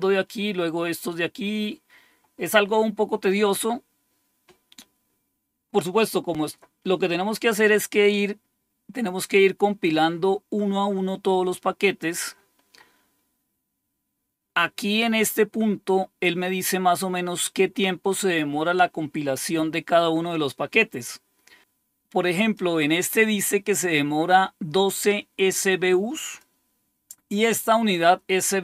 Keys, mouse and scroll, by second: 1.1-1.7 scroll down 2, 1.7 scroll down 1, 12.1-21.6 scroll up 3, 21.6 click, 26.2 click, 27.9 click.